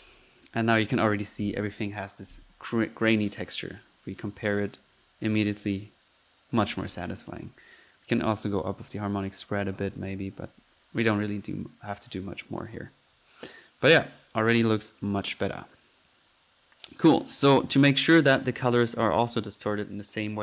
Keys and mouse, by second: 0.0-0.5 typing, 0.3-0.7 drag, 2.6 Escape, 3.4 click, 3.7 F1, 4.4 Escape, 4.8 click, 5.0 F1, 6.7 Escape, 8.3 click, 8.9 click, 9.9 F1, 9.9 click, 10.2 click, 10.8 Escape, 12.6-14.1 drag, 12.8 F1, 14.2 Escape, 14.7 middle click, 17.5 F1.